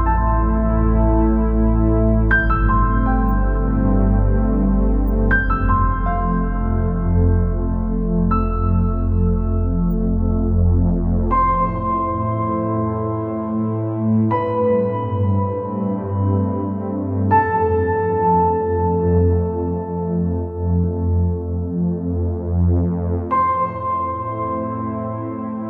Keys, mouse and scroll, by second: 1.2 scroll down 4, 1.6 click, 1.9 scroll up 2, 2.2 scroll down 2, 2.6 scroll up 2, 3.0 g, 3.5 z, 5.6 z, 7.8 click, 8.7 g, 10.6 click, 10.8 scroll down 5, 11.2-11.7 scroll up 4, 12.4-13.6 drag, 13.6-14.1 scroll down 4, 14.1-14.4 scroll up 3, 14.4 scroll down 2, 14.6-16.5 middle drag, 16.5 KP_0, 17.3 KP_0, 18.3-18.7 scroll up 3, 18.7 click, 19.0 scroll up 1, 20.1 s, 22.7 KP_0, 23.5 KP_0, 24.7 click.